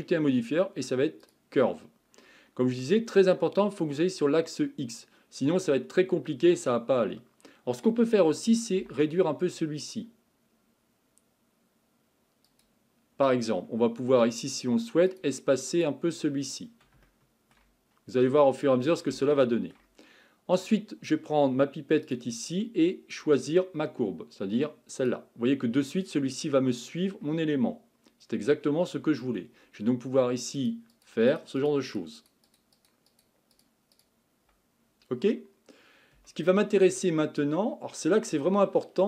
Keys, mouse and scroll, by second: 2.6-5.7 scroll down 5, 5.8-8.8 scroll up 7, 8.8 s, 15.1-17.1 drag, 17.1-17.9 shift+middle drag, 17.9-18.7 scroll down 1, 18.7-19.2 scroll down 5, 19.2-22.1 shift+middle drag, 22.1 click, 25.9-30.6 middle drag, 30.6-35.1 drag, 35.1-36.3 scroll up 4, 36.3-36.9 shift+middle drag, 36.9-37.6 scroll up 5, 37.6-38.4 scroll down 7, 38.4-39.0 middle drag.